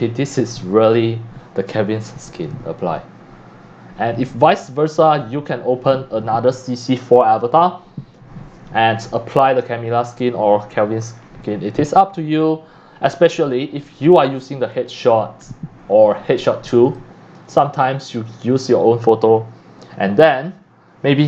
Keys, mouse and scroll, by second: 11.2 scroll down 1, 14.7 click, 16.9 click.